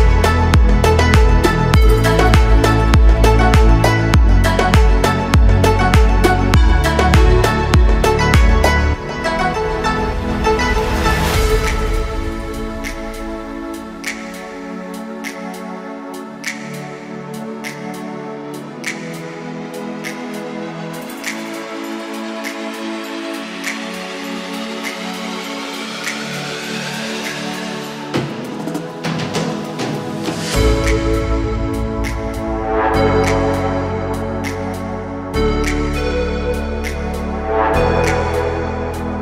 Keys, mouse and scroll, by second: 1.0-4.2 drag, 6.5 click, 8.2 ctrl+r, 9.8-10.8 right drag, 10.8 s, 14.4 click, 15.5 ctrl+r, 16.3 right click, 17.0-17.3 typing, 18.1 click, 19.2 alt+click, 19.7-20.3 middle drag, 20.8 alt+shift+click, 21.2-21.9 middle drag, 22.4 alt+shift+click, 22.7-23.3 middle drag, 23.9 alt+shift+click, 24.3 middle click, 26.0 KP_1, 26.8 scroll up 2, 27.2 shift+middle click, 28.5 s, 28.7 z, 31.8 click, 32.7-33.7 drag, 34.3 s, 37.3 click, 37.7 scroll down 1, 38.1 shift+middle click, 39.1 Tab.